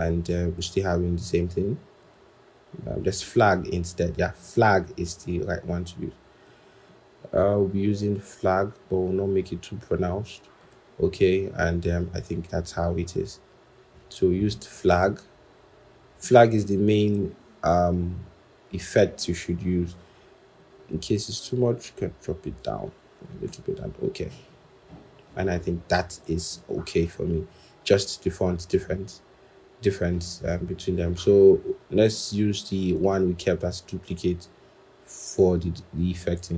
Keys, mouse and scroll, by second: 11.0 scroll, 20.4 Down, 20.5 Down, 20.7 Down, 22.1 Down, 22.3 Up, 23.0 Down, 23.3 Return, 29.9 scroll.